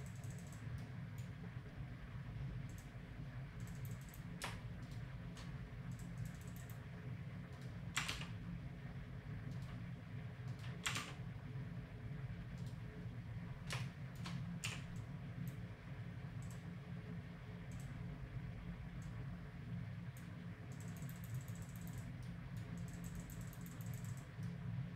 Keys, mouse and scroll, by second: 0.8-8.9 drag, 1.0-2.7 right drag, 4.9-7.0 right drag, 7.6 right click, 8.0 r, 8.9 right click, 10.6 right click, 10.6 r, 10.9 r, 14.6 x, 15.0-18.4 drag, 19.0-24.9 drag, 22.2-24.0 middle drag, 24.4-24.9 middle drag.